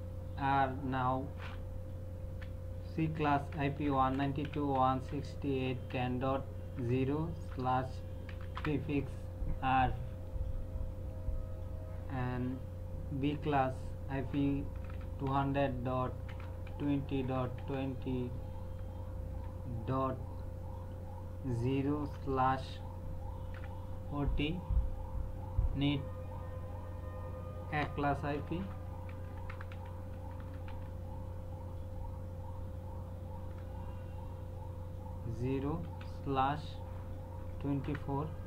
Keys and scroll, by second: 2.3-8.5 typing, 14.2-17.6 typing, 19.3 KP_0, 22.0 /, 22.6 KP_2, 23.5 KP_4, 28.3-30.7 typing, 33.4 KP_0, 35.8 /, 37.4 KP_2, 37.8 KP_4.